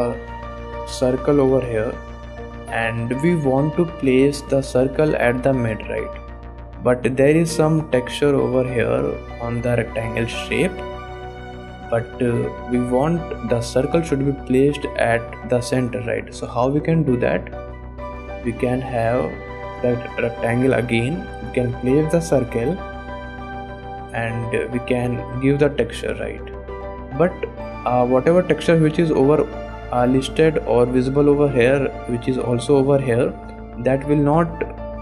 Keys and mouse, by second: 0.1-1.9 drag, 2.4 click, 2.9 click, 4.1 click, 6.5 click, 7.8 click, 8.4 click, 8.9 click, 9.5 click, 10.0 click, 10.6 click, 11.6 click, 12.6-13.4 drag, 16.6 shift+click, 17.5 click, 18.5-20.9 drag, 21.8-23.7 drag, 24.2 click, 25.7 click, 26.3 click, 27.1 click, 28.0 click, 34.4 click.